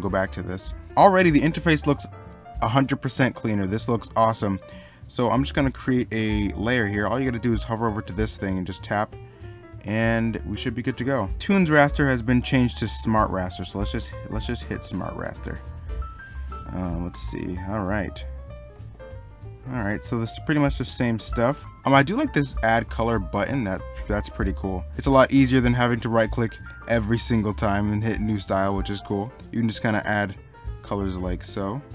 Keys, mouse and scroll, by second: 3.7 middle click, 16.1 middle click, 16.6 e, 17.1 b, 18.7 ctrl+z, 20.5 ctrl+z, 24.5 middle click, 25.0 ctrl+z, 25.8 right click.